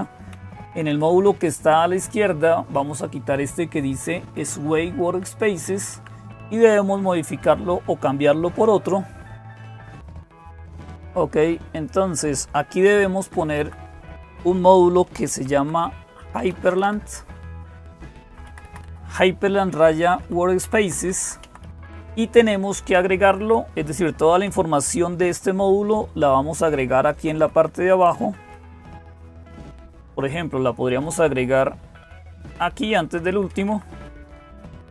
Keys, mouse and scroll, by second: 0.0-34.9 typing, 4.9 Delete, 5.1 Delete, 5.3 Delete, 5.7 Delete, 11.6 click, 13.0 Left, 13.3 Right, 17.6 Right, 18.1 Left, 18.3 Left, 18.5 Left, 18.7 Left, 19.8 Right, 20.0 Right, 20.4 Down, 20.6 Down, 20.8 Down, 21.0 Down, 21.2 Down, 22.1-22.7 Down, 24.1 Down, 27.2 Page_Down, 27.8 Page_Down, 28.0 Page_Down, 28.3 Page_Down, 29.7-30.8 Up, 32.0 Down, 32.6-33.0 Down, 33.1 Down, 33.3 Down, 34.7 Return.